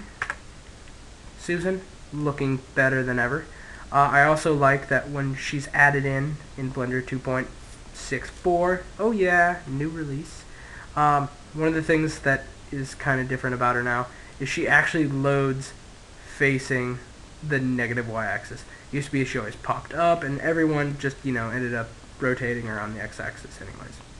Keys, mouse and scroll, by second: 0.4-5.2 middle drag, 8.8-11.0 middle drag, 13.6-14.2 scroll up 1, 14.2-15.9 middle drag, 17.7-21.6 middle drag, 21.4 r, 23.9 right click.